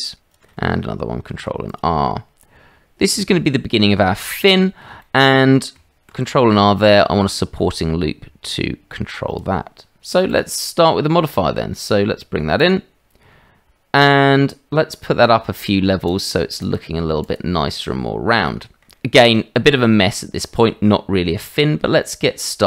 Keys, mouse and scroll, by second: 1.3 ctrl+r, 3.4 middle click, 3.7 click, 3.7 right click, 4.3 click, 4.3 right click, 5.0 shift+middle click, 5.4 click, 5.4 right click, 6.1 ctrl+r, 16.7 click, 17.2 click, 18.4 middle click, 18.9 middle click, 21.4 middle click, 22.0 shift+middle click.